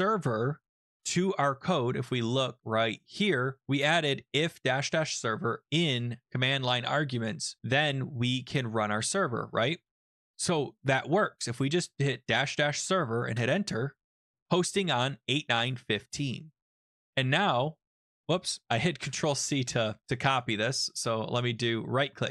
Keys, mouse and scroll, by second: 0.0-0.4 typing, 1.7 click, 3.1 click, 7.1 click, 8.5 click, 8.7 click, 9.5 alt+Tab, 13.4 Return, 15.7 click, 15.8 click, 17.0 ctrl+c, 19.0 shift+Return, 20.3 click, 20.5 click, 20.6 middle click, 21.6 click.